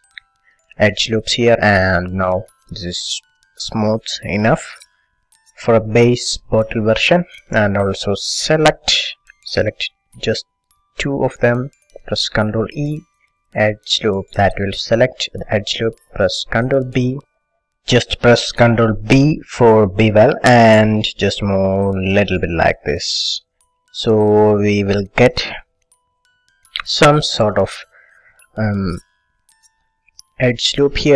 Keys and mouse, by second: 1.0-8.3 middle drag, 9.1 a, 9.2-13.8 drag, 12.6 ctrl+e, 16.7 ctrl+b, 24.2-26.0 drag, 26.0-31.1 middle drag.